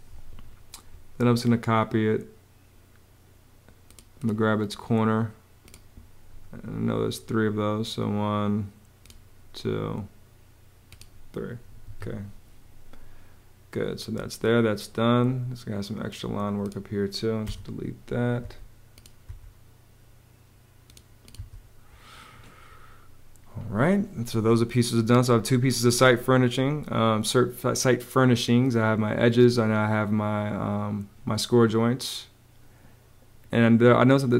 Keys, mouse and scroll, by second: 11.6 Home, 17.1 BackSpace, 18.2 BackSpace, 19.2 BackSpace, 21.1 BackSpace.